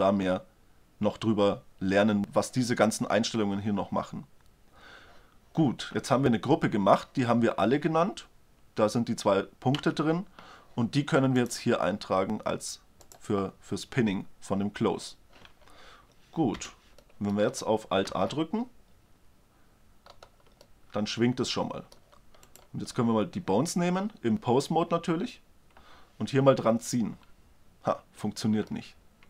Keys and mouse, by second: 9.8 Tab, 16.6 z, 17.1 middle drag, 17.5 middle click, 18.2 alt+a, 19.4 middle click, 22.4-23.9 right drag, 23.9-24.4 drag, 25.0 g, 28.7-29.1 middle drag, 29.2 middle click.